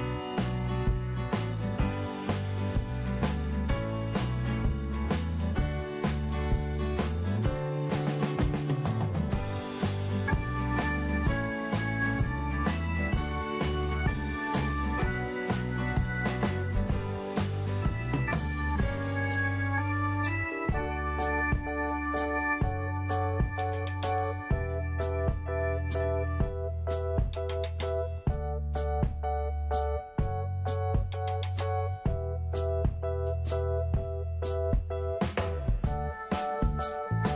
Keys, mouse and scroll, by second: 12.8-13.2 scroll up 1, 13.2-16.3 middle drag, 16.3-16.9 scroll up 1, 16.9 middle click, 18.1-18.7 scroll down 1, 20.1-21.6 middle drag, 21.6-22.3 scroll up 1, 22.3 click, 25.2-25.6 scroll up 1, 25.6 scroll down 1, 26.8 click.